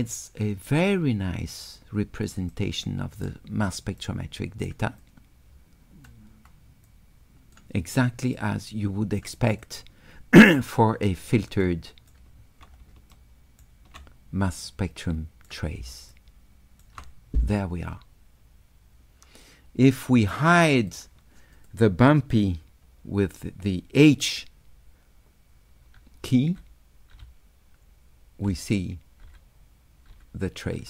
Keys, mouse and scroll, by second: 0.2-1.6 drag, 2.6 click, 2.6 right click, 4.0 right click, 5.0-6.1 drag, 6.9 click, 8.4 right click, 9.3-10.4 drag, 11.6 shift+right click, 11.9 shift+click, 13.2 shift+click, 14.7 click, 16.2 shift+click, 19.9-20.9 drag, 21.6 click.